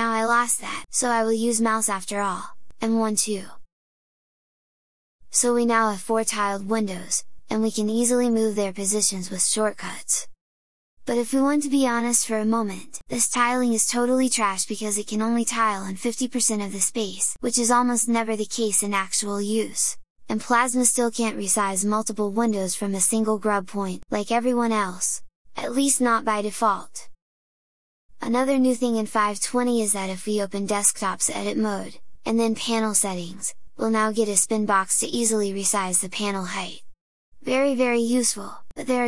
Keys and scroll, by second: 2.5 super+Right, 2.8 super+Down, 9.3 super+Left, 9.5 super+Down, 10.2 super+Left, 10.9 super+Up, 11.6 super+Down, 12.3 super+Left, 20.0 super+Right, 21.0 ctrl+super+Right.